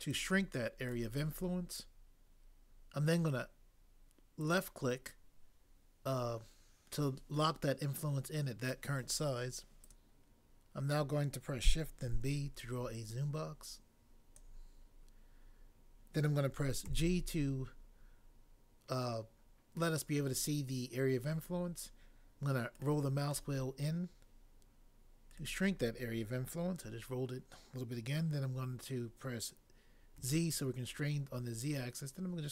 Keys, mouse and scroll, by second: 12.1 b, 16.9 g, 30.1 z.